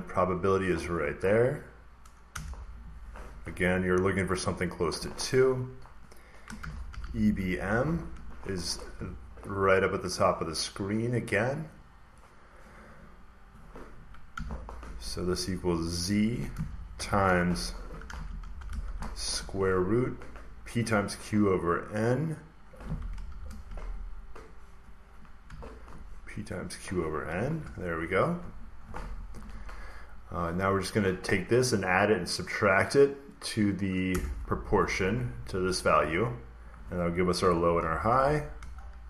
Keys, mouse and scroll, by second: 0.4-2.4 drag, 2.2 Return, 4.1 click, 6.2-8.0 typing, 9.5 click, 10.9 click, 12.3 click, 14.2 =, 15.8 click, 16.8-19.2 typing, 17.8 click, 22.0-23.2 drag, 23.2 *, 24.3 click, 25.4 /, 26.5 click, 27.5 ), 34.0 Return, 35.3-36.3 drag, 37.4 Return, 37.5-39.0 typing, 37.7 click.